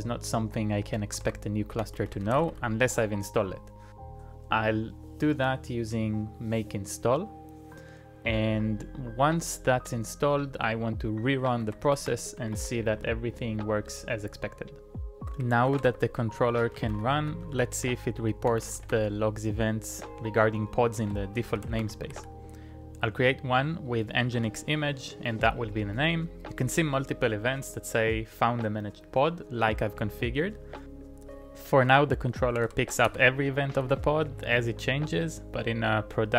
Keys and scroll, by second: 1.2 ctrl+c, 1.5-3.4 typing, 11.4-13.1 typing, 15.2 ctrl+a, 15.4-19.4 typing, 15.7 ctrl+a, 20.8-22.2 typing, 24.4 Return, 32.5-33.9 typing.